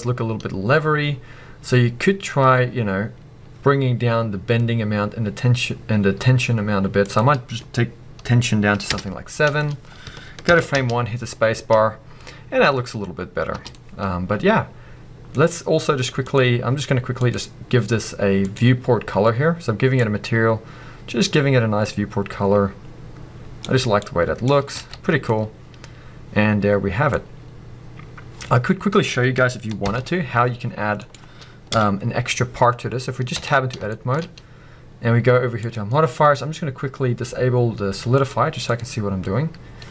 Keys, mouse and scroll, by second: 3.4-13.7 drag, 3.4-3.7 scroll down 1, 9.0 Return, 10.5 shift+Left, 10.7 space, 13.6 space, 13.7-16.3 middle drag, 15.4-16.3 scroll up 1, 16.3-18.9 drag, 24.8 alt+a, 24.9 scroll down 1, 25.3-31.0 middle drag, 27.1-29.9 scroll up 1, 29.9 shift+Left, 31.0 click, 31.7 KP_1, 32.4 scroll up 1, 33.4 b, 33.9-35.6 shift+middle drag, 35.6 click, 38.2-39.9 middle drag.